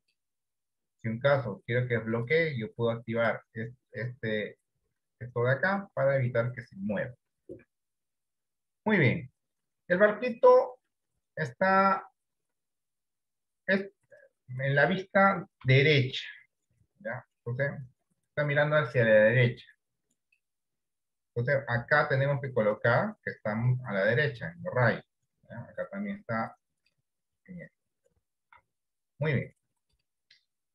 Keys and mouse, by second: 15.8 KP_3, 20.4 click, 23.0 click, 26.7 click, 28.8-30.7 right drag, 28.8 d.